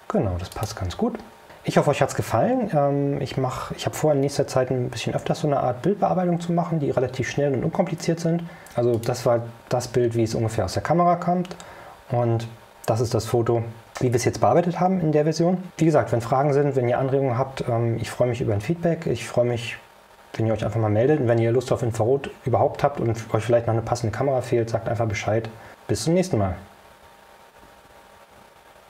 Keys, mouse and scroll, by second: 0.6 click, 9.0 click.